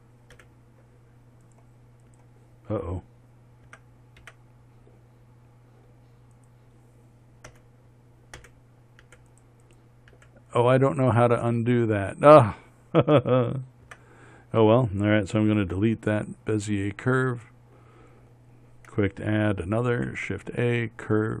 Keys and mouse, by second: 4.1 h, 4.2 Tab, 4.7 Tab, 8.0 g, 8.9 h, 9.5 h, 10.6 h, 14.4 Tab, 16.1 x, 20.4 shift+a.